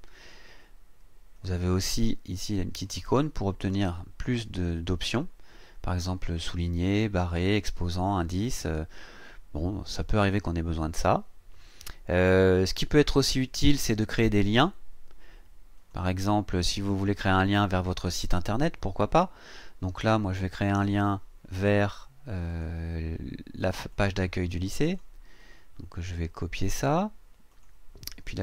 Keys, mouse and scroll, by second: 1.3 click, 2.8 click, 15.7 click, 22.5 click, 23.6 click, 23.9 click, 24.5 click, 25.4 right click, 26.5 click, 27.5 click.